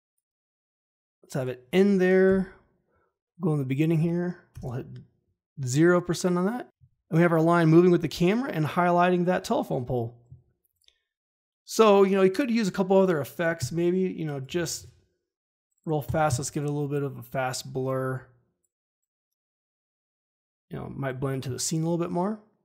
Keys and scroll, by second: 2.2 Home, 4.5 0, 4.5 Return, 14.2-15.2 typing.